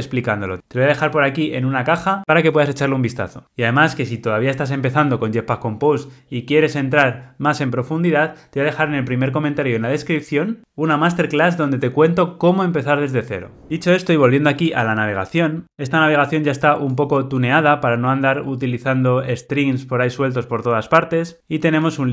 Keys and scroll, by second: 17.0 super+b.